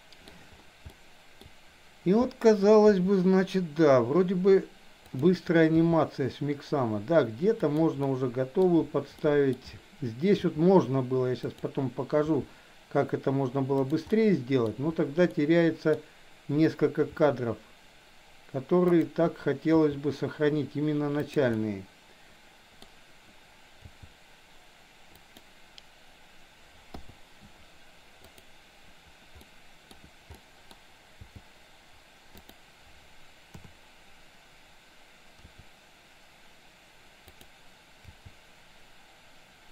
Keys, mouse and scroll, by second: 1.0 shift+middle click, 2.9 r, 5.9 g, 8.0 middle click, 9.1-9.6 middle drag, 10.4 r, 12.4 g, 14.1 middle click, 15.4 middle click, 17.1 r, 19.8 g, 21.5-22.9 middle drag, 23.8 g, 27.0 i, 28.3 click, 29.5-29.9 middle drag, 30.4 middle click, 31.3 g, 33.5 KP_7, 35.5 r, 38.3 g.